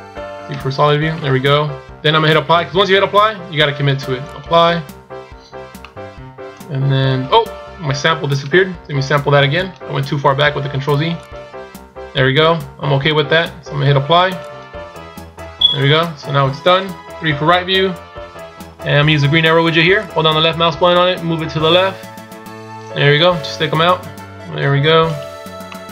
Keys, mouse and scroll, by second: 0.4 z, 4.1 click, 5.7 middle click, 9.4 click, 14.3 click, 16.9 KP_3, 19.9 click, 23.6 KP_1, 24.9 right click, 25.6 middle click.